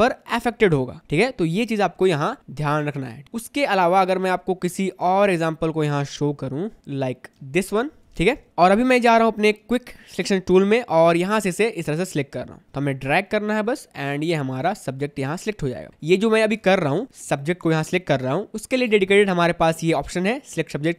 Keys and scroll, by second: 3.5 v, 4.9 space, 7.5 space, 11.5 space, 17.0 space.